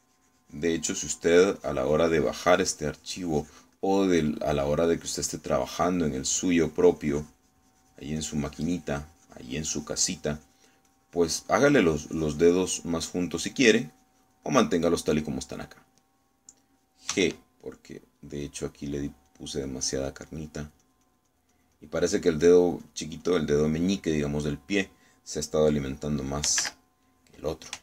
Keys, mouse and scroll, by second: 0.1-2.3 drag, 1.8 middle click, 2.3-3.5 drag, 3.5-5.7 drag, 5.9-11.8 drag, 11.9-14.0 drag, 14.3 middle click, 14.8 click, 18.2 g, 18.7 click, 19.5 click, 20.0-21.6 drag, 24.5 click, 25.2 middle click, 26.3 middle click, 27.7 3.